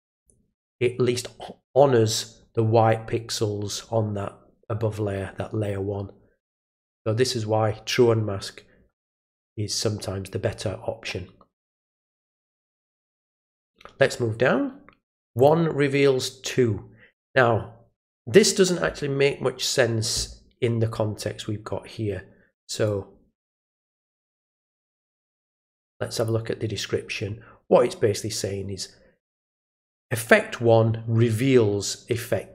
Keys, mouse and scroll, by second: 0.1 click, 13.3 click, 15.3 click, 22.8-23.7 drag, 24.2-25.2 drag, 26.1 click.